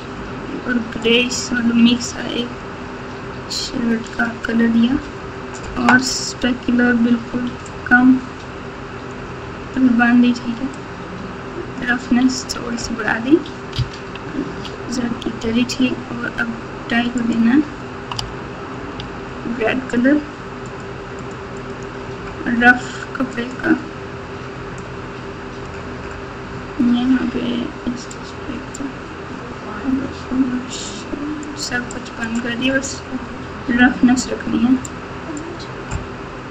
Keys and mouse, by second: 1.0 click, 7.6-9.7 drag, 10.8-11.8 drag, 14.5 ctrl+z, 17.3 click, 18.1 Tab, 18.9 Tab, 21.5 click, 28.2 click, 30.8 click, 32.0 click, 34.9 click.